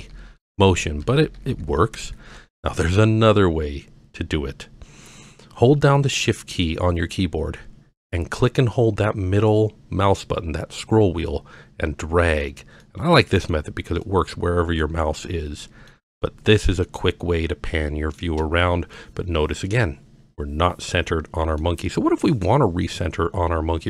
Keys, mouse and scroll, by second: 0.1 ctrl+KP_4, 0.5 ctrl+KP_4, 0.7 ctrl+KP_4, 0.9 ctrl+KP_2, 1.1 ctrl+KP_2, 1.4 ctrl+KP_8, 1.5 ctrl+KP_8, 1.7 ctrl+KP_8, 1.9 ctrl+KP_8, 2.0 ctrl+KP_8, 3.5-4.2 scroll up 3, 11.3-12.4 shift+middle drag, 12.8 shift+middle click, 14.0-14.8 shift+middle drag, 15.2-15.9 shift+middle drag, 16.2-16.6 shift+middle drag, 16.8-18.2 shift+middle drag, 18.9-21.6 middle drag, 22.0-22.3 scroll down 1.